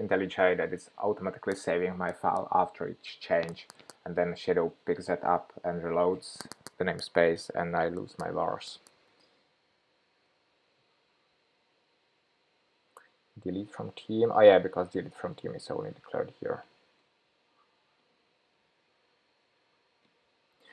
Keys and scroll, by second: 9.8 shift+super+p, 16.5 shift+super+p, 19.1 shift+super+p.